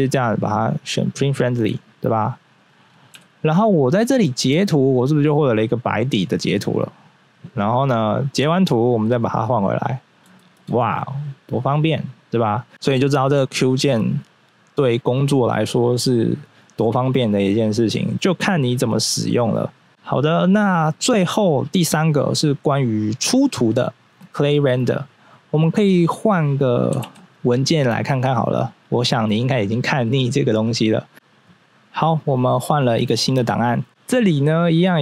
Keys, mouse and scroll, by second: 0.5 click, 2.1 click, 3.1 n, 3.4 scroll down 1, 3.8-5.0 scroll up 3, 4.2 shift+middle click, 4.4 shift+middle click, 8.4 q, 9.5 click, 10.0 scroll up 1, 10.3 shift+middle click, 11.2 click, 11.8-12.7 scroll down 1, 19.2 scroll down 1, 32.0 scroll down 1, 33.4 right click, 34.4 click.